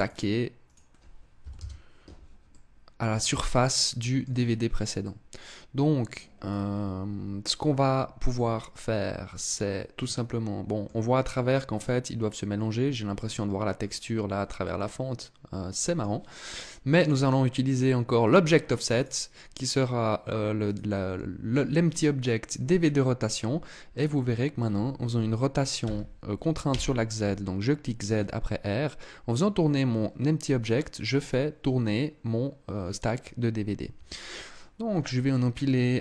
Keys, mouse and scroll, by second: 0.2 click, 2.0 middle click, 4.6 middle click, 6.0-6.4 scroll down 3, 7.9 middle click, 14.2 middle click, 16.5 click, 18.5 click, 23.5 right click, 25.4 r.